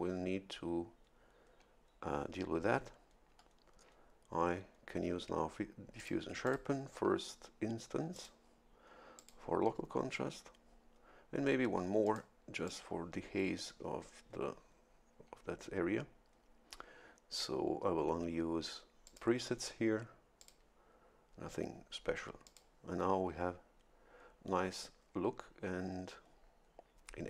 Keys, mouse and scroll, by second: 6.0 click, 6.4 click, 8.1 click, 9.2 click, 12.0 click, 12.6 click, 19.0 click, 20.4 click, 22.4 click.